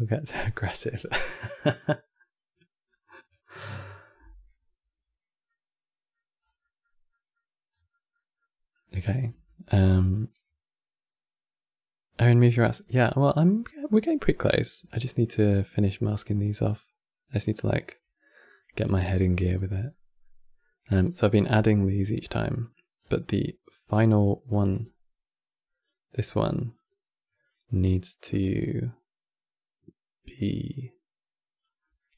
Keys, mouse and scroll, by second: 5.1 middle click, 6.1 scroll down 3, 6.3-7.4 middle drag, 7.4 scroll down 3, 7.6-8.9 middle drag, 8.9 scroll down 1, 9.1-12.2 shift+middle drag, 13.6-17.1 middle drag, 17.1-17.9 scroll up 2, 18.9-22.7 middle drag, 22.7 scroll down 3, 23.0-24.2 middle drag, 24.2 click, 26.4-28.2 drag, 31.5-32.1 middle drag.